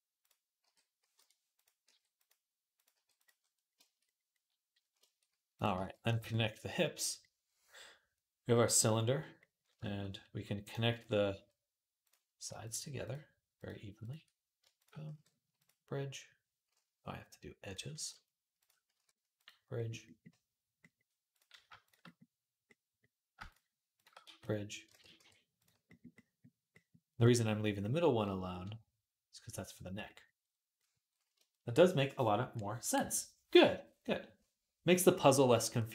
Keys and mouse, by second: 0.4 g, 1.4 click, 1.7 g, 2.6 click, 2.7 g, 3.5-12.3 shift+drag, 5.5 g, 12.3 shift+middle click, 12.8 shift+click, 12.9 shift+middle click, 13.3 shift+click, 13.4-17.5 shift+middle drag, 14.9 q, 17.5 click, 18.4-23.1 shift+middle drag, 18.7 q, 23.3 shift+click, 24.0 f, 24.8 ctrl+z, 24.9 q, 25.7 click, 27.1-35.3 drag, 35.3 middle click, 35.6 click.